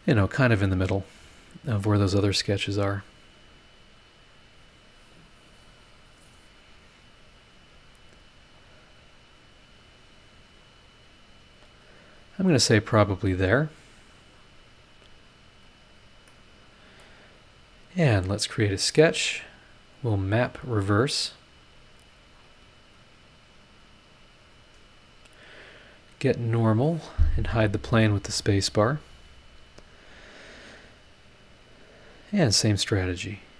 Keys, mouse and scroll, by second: 14.0-14.3 scroll down 2, 14.3 scroll up 2, 15.6 click, 16.3 middle click, 16.3 click, 16.3 right click, 17.3 click, 18.8 click, 21.2 click, 22.3 scroll down 1, 22.9 click, 24.1 click, 24.5 click, 25.0 click, 26.5 click, 26.8 middle click, 27.4 click, 28.2 space, 28.9 scroll up 1, 29.8 scroll up 1, 31.6 click, 32.1-32.5 scroll up 1.